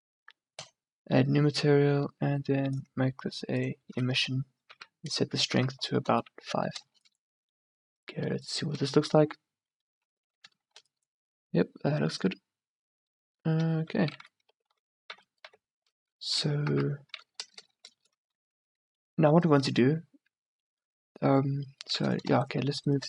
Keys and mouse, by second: 5.7 KP_0, 6.9 shift+b, 10.8 shift+b, 14.7 z, 15.1 a, 15.5 z, 16.7 KP_0, 17.7 shift+b, 21.8 middle click, 22.4 right click.